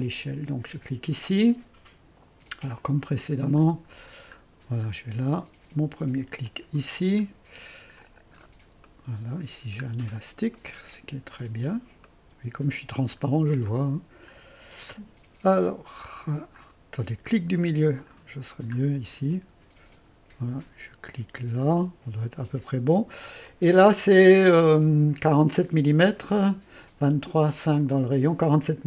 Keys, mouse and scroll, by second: 0.0-2.7 drag, 2.7 middle click, 3.5-5.4 scroll up 1, 6.4 click, 7.2-8.9 scroll down 1, 8.9 click, 9.9-10.6 scroll up 1, 10.6 click, 11.4-12.1 scroll up 1, 12.1 click, 13.7 click, 17.8 middle click, 18.9-21.6 scroll up 1, 21.6-22.8 drag, 23.5-24.7 drag, 24.7-25.8 scroll down 1.